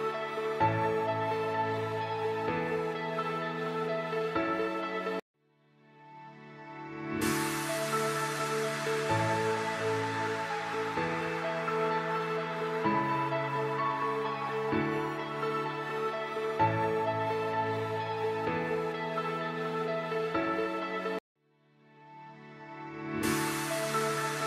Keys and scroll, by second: 1.3 space, 9.5 shift+Page_Down, 12.6 space, 14.1 alt+c, 16.4 shift+F2, 16.9 Escape.